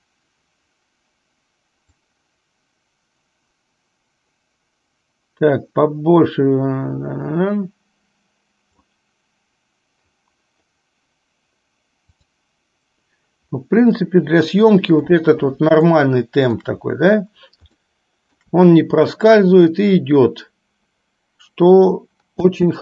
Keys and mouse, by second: 2.1-9.1 drag, 12.4 drag, 14.2-15.3 middle drag, 16.1 shift+middle click, 17.9-18.6 shift+middle drag, 22.6 space.